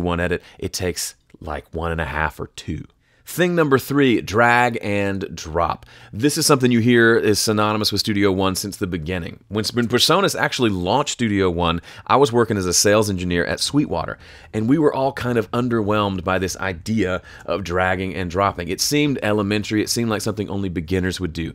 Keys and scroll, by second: 17.2 shift+super+m.